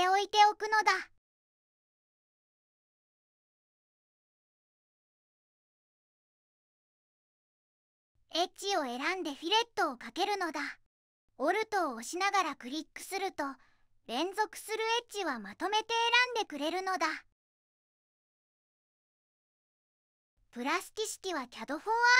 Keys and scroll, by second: 4.7 q, 5.8 q, 8.0 2, 14.5 Tab, 15.2 Tab, 16.3-17.0 typing, 16.5 Tab, 17.1 Tab, 17.3 Return, 17.4 Return, 18.8 2.